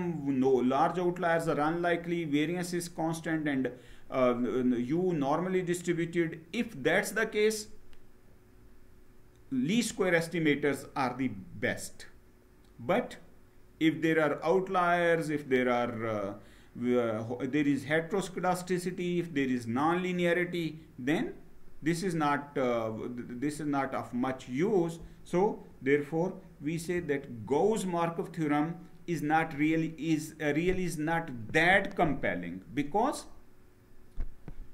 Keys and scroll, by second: 26.5 Down.